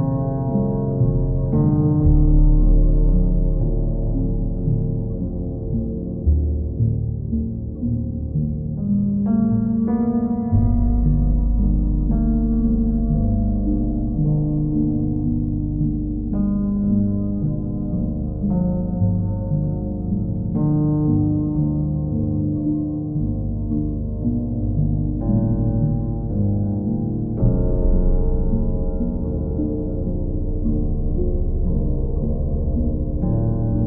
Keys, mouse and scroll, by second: 1.4 ctrl+click, 2.4 click, 5.2 click, 9.2 click, 10.5 click, 11.4 click, 11.8 shift+click, 12.6 shift+click, 12.8 click, 13.4 click, 15.3 click, 19.1 click, 21.5 click, 21.8 shift+click, 22.5 ctrl+click, 24.5 ctrl+click, 27.0 click, 27.5 ctrl+click, 28.1 click, 29.5 click, 32.8 click.